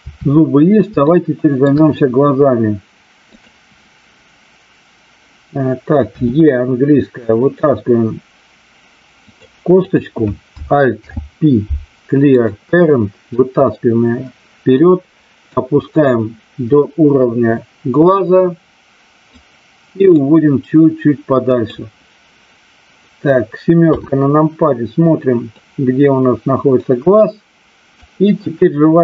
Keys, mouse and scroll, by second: 1.0 shift+middle click, 6.1 e, 9.2 click, 9.7 click, 10.9 alt+p, 13.3-14.7 drag, 15.5-19.2 drag, 20.1-21.6 drag, 23.9 KP_7, 25.6-28.0 drag.